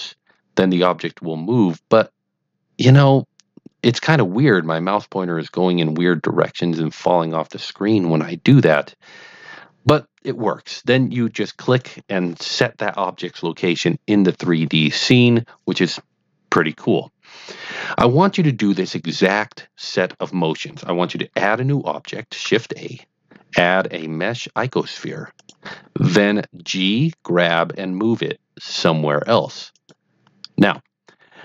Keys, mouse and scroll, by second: 11.8 click, 22.4 shift+a, 25.3 click, 27.3 g, 29.6 click, 30.9 click.